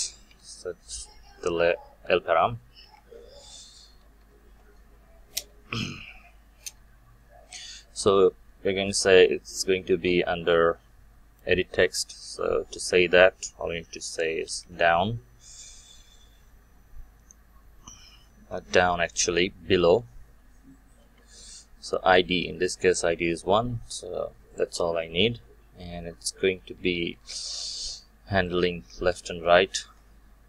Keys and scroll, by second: 5.3 Return, 21.0 Return, 29.7 ctrl+c.